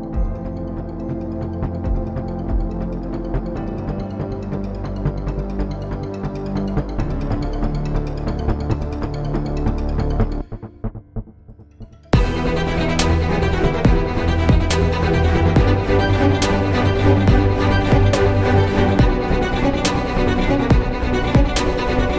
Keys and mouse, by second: 1.5-2.7 drag, 1.9 s, 3.0 Tab, 4.3 z, 6.8 Tab, 8.4 s, 13.9 s, 16.1 Tab, 17.3 ctrl+Tab, 18.5 ctrl+a, 19.2 Tab.